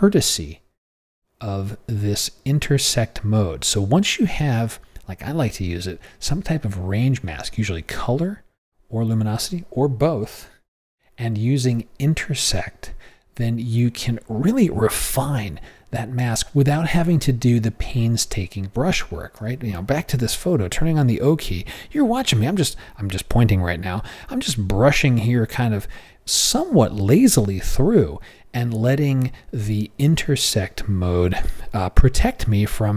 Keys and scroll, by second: 20.3 o.